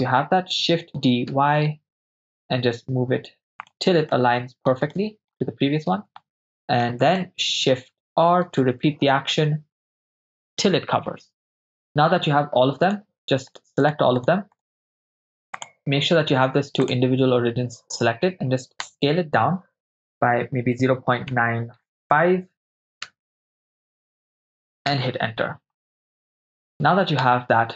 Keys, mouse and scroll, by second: 1.1 shift+d, 1.3 y, 3.7 ctrl+drag, 4.3-4.7 ctrl+middle drag, 5.0 shift+middle drag, 6.2-6.8 ctrl+middle drag, 7.3 shift+middle click, 8.6-11.3 typing, 13.0 right click, 13.5-14.7 shift+right drag, 14.8 shift+right drag, 15.6-17.0 drag, 20.8 0, 20.9 ., 21.4 9, 23.1 5, 24.9 Return, 27.6 Tab.